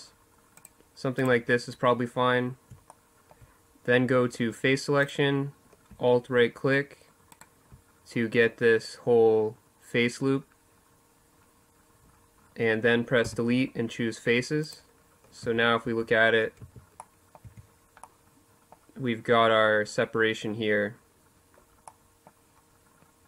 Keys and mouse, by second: 1.7 middle click, 2.0-6.0 drag, 6.0-12.0 right drag, 12.0 Delete, 13.9 middle click, 14.1 z, 14.6 middle click, 14.6 a, 15.3 a, 16.2 Tab, 20.6 middle click.